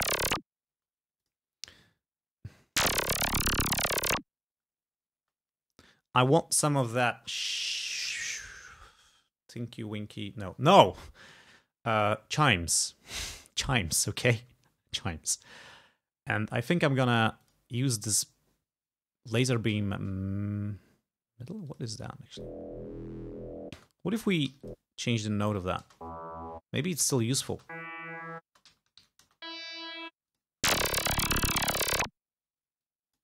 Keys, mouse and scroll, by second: 0.7 space, 1.3 click, 2.6 space, 3.8 scroll up 2, 5.2 space, 5.7 scroll down 2, 14.1 scroll up 2, 14.7 scroll down 2, 15.1 scroll up 2, 15.5 scroll down 2, 16.2 scroll up 2, 17.4 click, 18.0 scroll down 2, 21.7 click, 22.2 space, 23.8 space, 24.5 e, 24.7 click, 25.5 alt+Up, 25.9 alt+space, 26.7 space, 27.2 alt+Up, 27.5 alt+space, 28.5 space, 29.0 alt+Up, 29.3 alt+space, 30.2 space, 30.3 click, 32.6 space, 32.8 click.